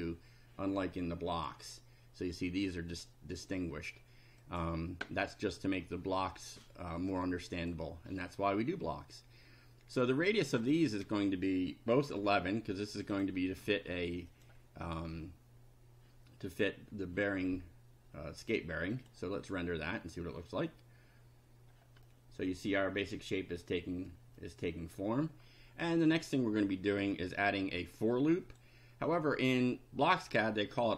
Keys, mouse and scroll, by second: 1.4 click, 4.4 click, 7.1 click, 10.3 click, 12.0 1, 13.0 click, 13.6 KP_1, 14.3 click, 19.0 click, 22.0-24.2 middle drag, 24.3 middle click, 27.8 click.